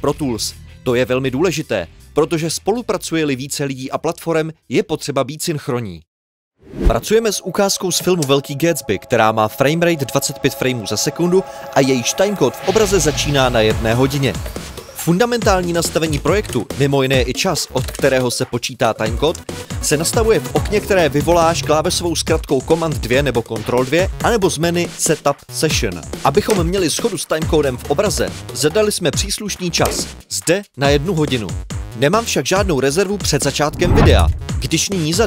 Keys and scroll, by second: 0.0-0.9 typing, 3.8 super+l, 6.4 super+2, 8.0 super+2, 19.2-19.5 typing, 26.5 Home, 29.8 Home.